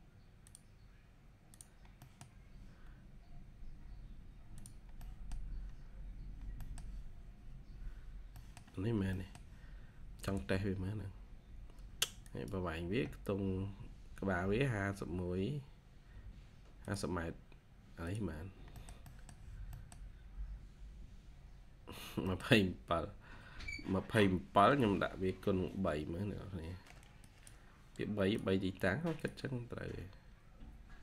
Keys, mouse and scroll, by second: 1.9 middle click, 4.9 middle click, 5.7-6.5 scroll down 1, 6.5 middle click, 6.8-7.1 scroll down 1, 7.1-8.3 scroll up 1, 8.3 middle click, 8.7 scroll down 1, 9.0 middle click, 9.6-10.1 scroll up 1, 10.1 typing, 18.3 scroll down 1, 18.7 middle click, 20.1-20.9 scroll up 1, 21.5-22.2 scroll down 1, 22.2 middle click, 22.7 scroll up 1.